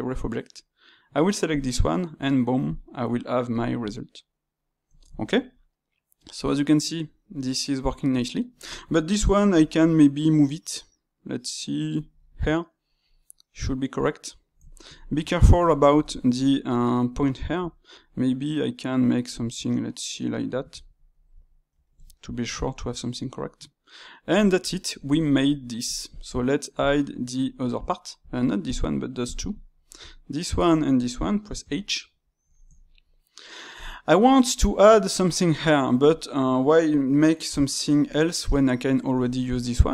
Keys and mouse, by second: 1.4-2.7 drag, 2.9-9.5 middle drag, 9.5 g, 12.2-17.6 middle drag, 17.6 g, 20.7-23.7 ctrl+middle drag, 23.9-26.0 middle drag, 26.0 shift+click, 26.7 shift+click, 28.6-29.3 drag, 30.4 shift+click, 31.5 h, 32.1-33.7 middle drag, 33.7-34.1 drag, 34.1-39.9 middle drag.